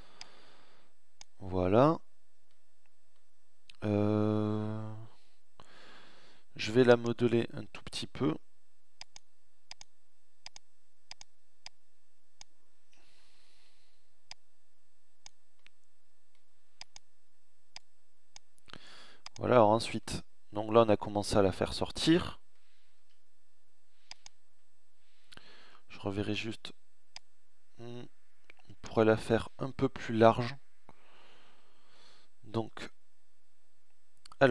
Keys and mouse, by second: 0.5-1.9 middle drag, 4.0-5.9 middle drag, 8.9-11.9 drag, 12.5 ctrl+z, 20.2 click, 21.9 KP_1, 24.5 KP_1, 30.5 ctrl+z, 34.3 middle click.